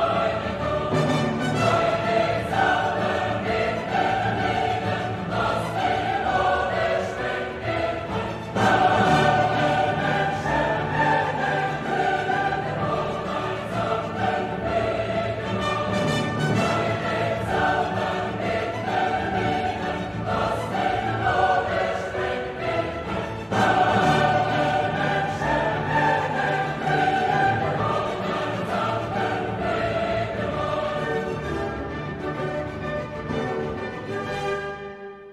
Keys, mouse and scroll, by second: 0.1 click, 0.6 space, 1.1 click, 2.9 click, 4.2 right click, 5.4 click, 7.0 click, 23.9 click, 24.8 click, 25.4-26.8 drag, 27.8 click, 28.2 click, 28.5-29.3 drag, 29.8 click, 30.2 click, 31.5 click, 34.2 F2.